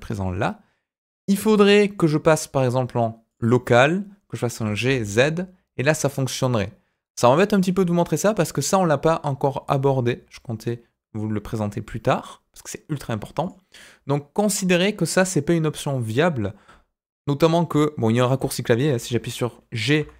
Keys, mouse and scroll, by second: 1.9-3.6 drag, 4.5 g, 8.5-15.3 drag, 18.3 middle click, 18.9 g.